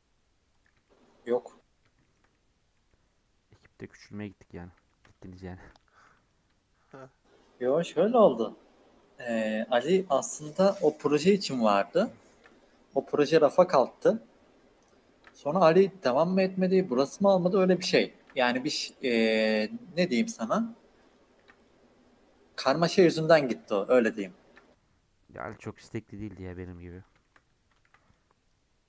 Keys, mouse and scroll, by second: 0.8 shift+middle click, 1.6-2.0 scroll down 3, 2.0-6.0 shift+middle drag, 6.0 Tab, 6.7 ctrl+1, 7.7 scroll down 1, 7.9 ctrl+2, 8.6 ctrl+3, 9.0 middle click, 9.3 Tab, 9.6 scroll up 2, 10.4 Tab, 10.9 Tab, 11.3 middle click, 11.6 scroll up 1, 11.8 middle click, 12.3 ctrl+r, 15.1 ctrl+r, 17.5 shift+middle click, 18.1 ctrl+r, 21.3 ctrl+r, 23.7 shift+middle click, 24.5 ctrl+r, 27.2 shift+middle click, 27.8 ctrl+r.